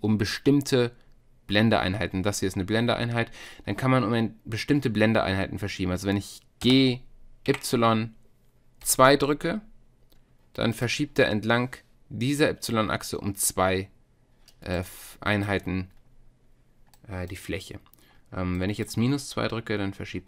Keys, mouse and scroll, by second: 6.6 g, 14.8-15.9 middle drag, 15.9-17.0 drag, 17.0-18.3 middle drag.